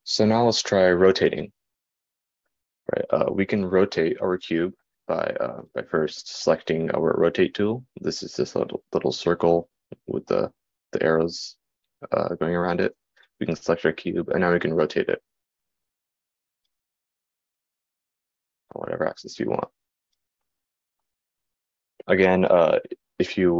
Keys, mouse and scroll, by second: 8.4-20.5 drag.